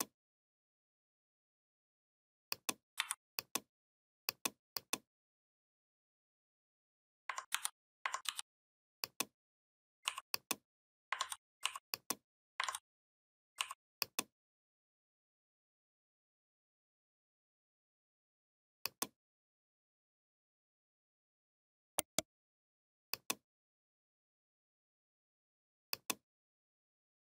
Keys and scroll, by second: 2.8 v, 7.3 ctrl+c, 8.1 ctrl+f, 11.0 ctrl+z, 12.4 ctrl+z.